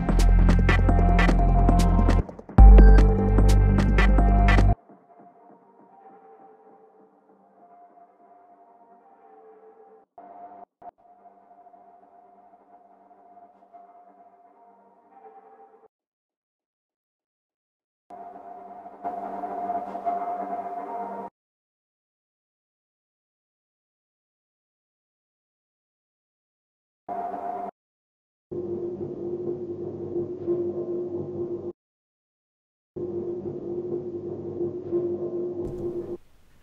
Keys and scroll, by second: 16.3 shift+super+Tab, 21.8 BackSpace.